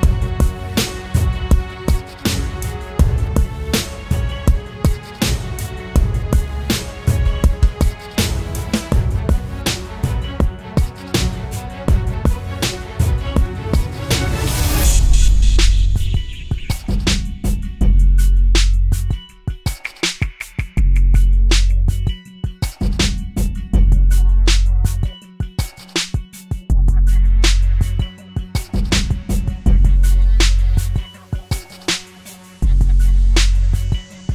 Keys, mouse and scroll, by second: 28.8-31.0 typing.